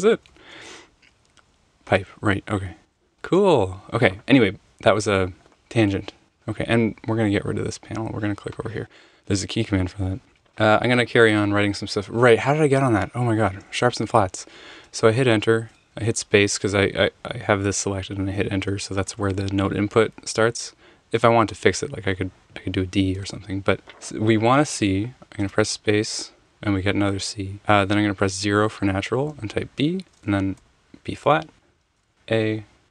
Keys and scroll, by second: 2.6 |, 2.8 |, 3.0 |, 14.8 Return, 18.7 Return, 19.0 Return, 21.8 d, 23.2 super+z, 25.4 space, 26.5 c, 28.2 0, 29.3 b, 30.0 -, 30.6 b, 32.0 a.